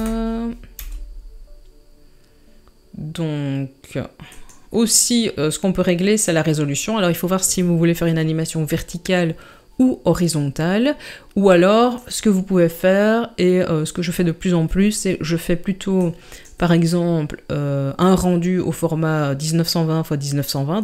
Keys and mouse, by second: 0.8 g, 11.9 click, 16.1-20.8 drag.